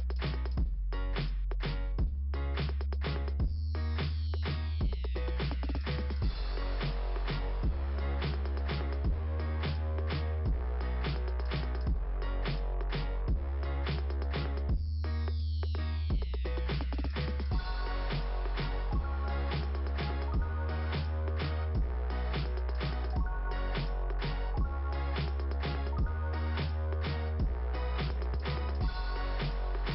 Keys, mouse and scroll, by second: 0.0 click, 4.3 click, 7.6 click, 10.5 click, 13.0 click, 21.0 click, 22.3 click, 23.5-24.7 scroll down 1, 24.7 scroll down 1, 28.3 click.